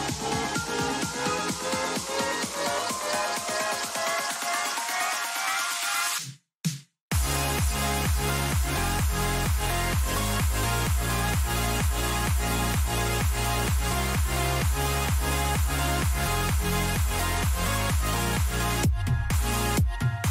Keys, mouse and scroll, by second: 8.3-14.2 middle drag, 18.3 right click, 19.0-20.2 middle drag.